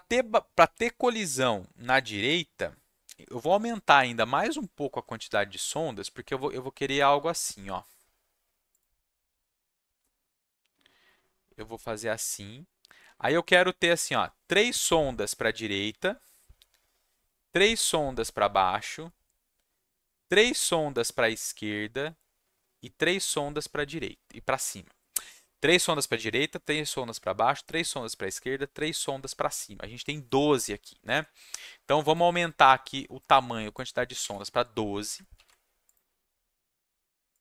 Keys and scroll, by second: 33.9-34.7 typing, 35.3 ctrl+s.